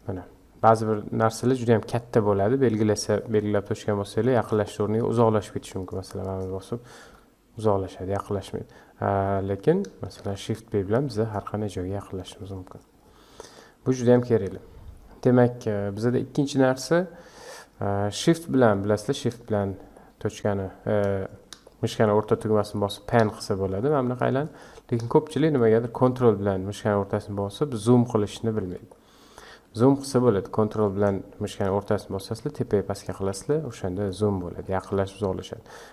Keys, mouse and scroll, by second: 0.0 scroll down 5, 0.7-1.4 scroll down 8, 1.8 click, 3.5 KP_Decimal, 4.9-5.3 scroll up 8, 5.4-5.7 scroll down 1, 5.7 click, 6.2 click, 7.0 KP_Decimal, 9.1-10.1 scroll up 6, 10.1 shift+b, 12.4-13.5 scroll down 23, 13.5-16.7 middle drag, 19.9-35.8 shift+middle drag, 35.8-35.9 scroll down 5.